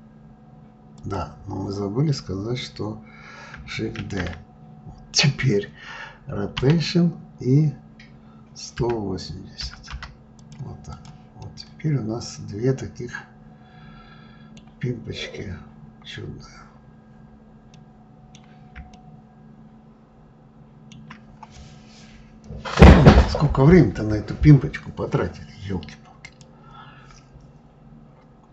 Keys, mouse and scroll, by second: 3.8 shift+d, 10.6 click, 11.1-14.3 middle drag, 14.8 scroll up 2, 15.5 scroll up 4, 16.5-16.8 scroll down 2, 17.4-21.7 middle drag.